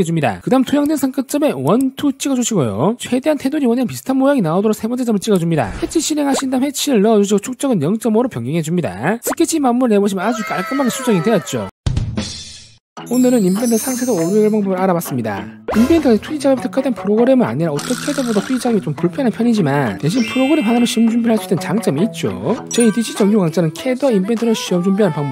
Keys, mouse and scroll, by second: 1.2 click, 2.2 click, 5.3 click, 6.4 click, 7.9 5, 8.8 click, 10.1 click.